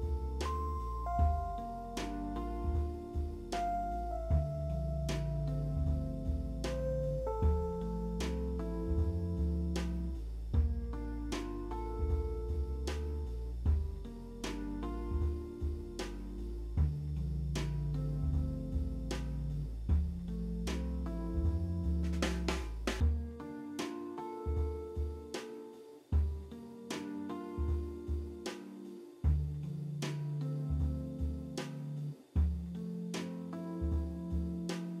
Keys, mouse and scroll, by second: 0.0 middle click, 0.4 middle click, 0.5 alt+middle click, 2.1 middle click, 2.3 alt+middle click, 3.2 middle click, 3.8 ctrl+c, 7.0 alt+click, 8.8 middle click, 9.4 middle click, 10.5 e, 14.9 middle click, 17.0 middle click, 19.2 alt+w, 19.7 middle click, 20.0 middle click, 20.2-20.6 scroll up 1, 21.1 scroll up 3, 21.1 w, 21.3-22.1 scroll down 1, 25.3 p, 25.5 z, 25.7 alt+middle click, 25.9 alt+scroll up 1, 26.0 F3, 27.3 alt+middle click, 27.6 alt+middle click, 27.9 F4, 28.3 F4, 29.7 alt+middle click, 29.9 alt+middle click, 34.4 alt+w.